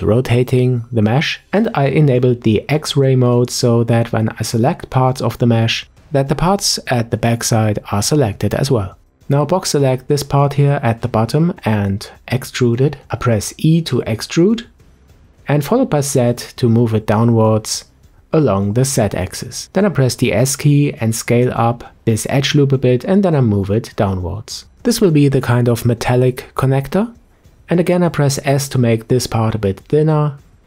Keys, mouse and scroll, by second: 3.6 ctrl+click, 8.4-10.1 scroll up 3, 10.1 click, 15.9 e, 20.4 s, 23.0 e, 26.2 s, 28.6-30.2 scroll down 1, 30.2-30.6 scroll down 2.